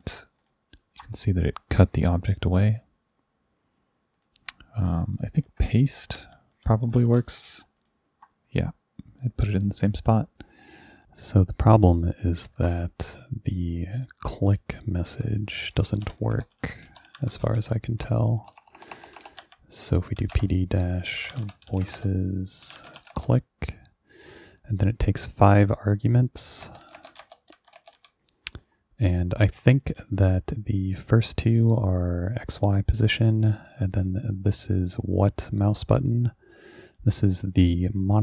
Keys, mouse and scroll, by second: 0.0 click, 0.4 ctrl+click, 4.2 click, 4.7 drag, 6.2-7.5 typing, 7.4 click, 7.8 ctrl+click, 9.3 click, 11.0 click, 11.6 click, 12.2 click, 12.7 ctrl+2, 12.8 click, 13.9 click, 14.6 click, 15.2 click, 16.1-23.6 typing, 16.4 Return, 26.6-28.1 typing, 29.1 click, 29.6 click, 29.9 click, 31.1-32.4 drag, 32.6 click, 33.3-34.3 drag, 34.8 click, 35.3 click, 36.2 click.